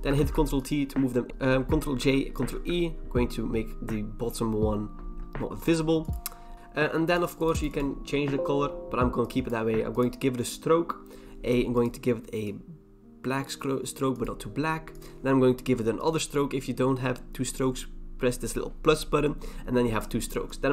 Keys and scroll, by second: 0.2 ctrl+t, 1.3 Return, 2.0 ctrl+j, 2.3 ctrl+e.